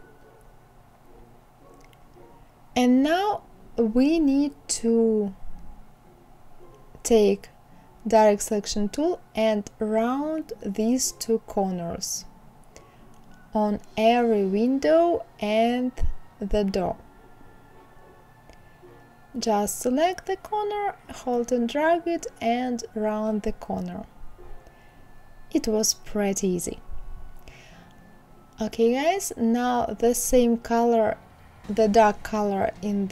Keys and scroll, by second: 4.8 Left.